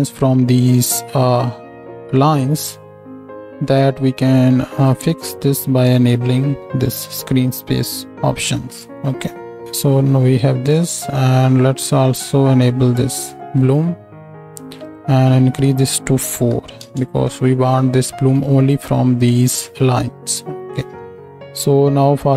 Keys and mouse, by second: 3.9-8.2 middle drag, 5.8-9.6 drag, 5.8-8.2 right drag, 5.8 n, 8.8 n, 11.0-13.3 middle drag, 14.8-18.8 drag.